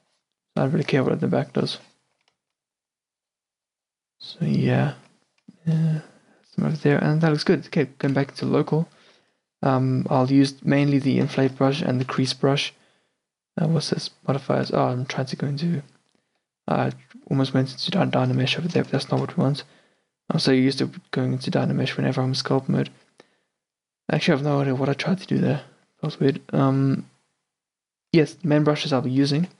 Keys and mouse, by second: 0.9-1.3 drag, 2.2-5.2 middle drag, 5.9-8.1 middle drag, 8.1 KP_Divide, 11.5 i, 11.8 middle drag, 12.1 shift+d, 18.2-22.0 middle drag, 23.9-25.9 middle drag, 29.5 t.